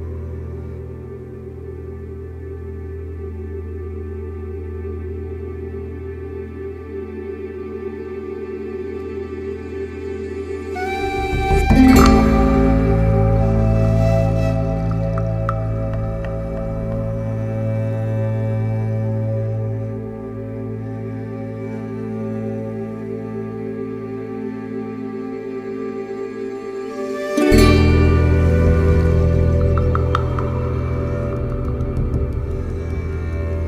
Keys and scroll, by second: 30.4 2, 30.5 Return, 33.5 4.